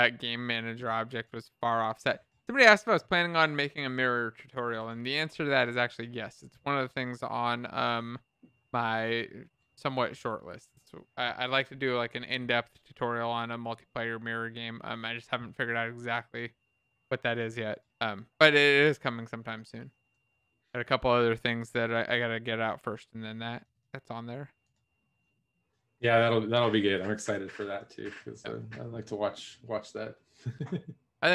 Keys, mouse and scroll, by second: 24.9 click.